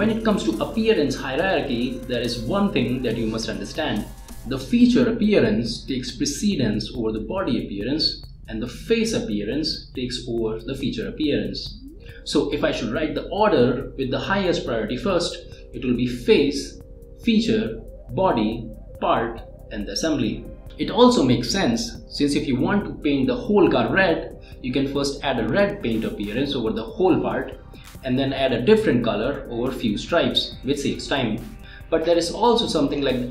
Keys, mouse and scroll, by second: 6.2 click, 11.9 click, 15.1 click, 15.5 space, 22.7-25.4 middle drag, 29.3 click.